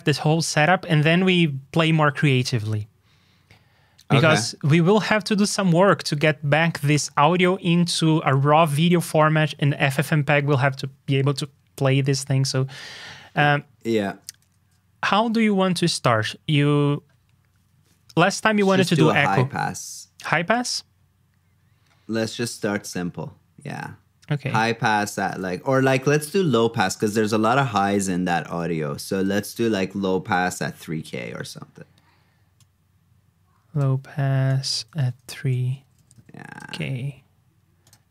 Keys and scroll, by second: 25.2 super+c, 25.3 super+v.